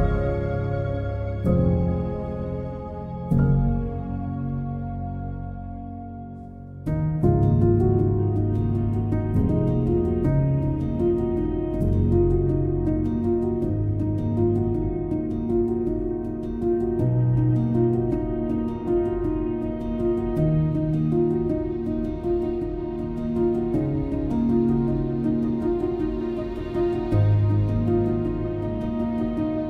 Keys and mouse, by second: 0.4 r, 1.6 2, 2.6 ctrl+b, 4.3 click, 7.1 ctrl+b, 7.8 click, 9.4 shift+middle click, 11.1 1, 12.7 j, 13.3 click, 14.4 j, 16.5 j, 17.1 2, 17.3 click, 18.3 ctrl+b, 20.2 1, 21.9 j, 24.1 j, 24.7 click, 27.4 j, 28.3 shift+click, 29.1 j, 29.5 click.